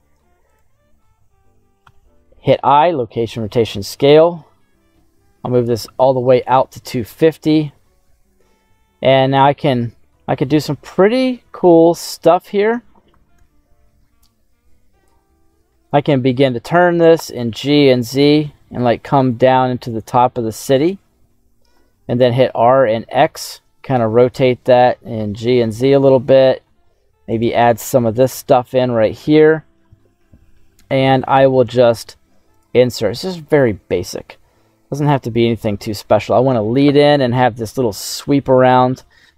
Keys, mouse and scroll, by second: 0.4 click, 1.8 i, 4.1-5.6 drag, 7.6 r, 12.3 right click, 13.0 r, 13.3 y, 15.8 click, 16.7 g, 17.1 z, 20.7 click, 21.7 r, 22.1 x, 24.1 click, 24.3 g, 24.7 z, 25.8 click, 26.3 r, 26.7 y, 27.2 click, 32.6 i, 35.0 click.